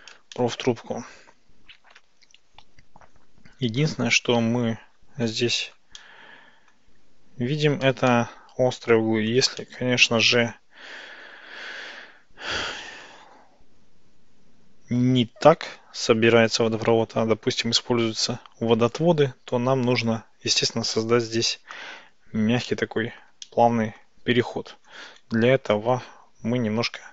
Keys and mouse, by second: 0.4-2.1 shift+middle drag, 6.1-6.8 shift+middle drag, 8.1-9.4 shift+middle drag, 9.7-17.1 middle drag, 19.1 click, 22.7-23.3 middle drag, 23.5-24.1 shift+middle drag, 26.1 ctrl+z.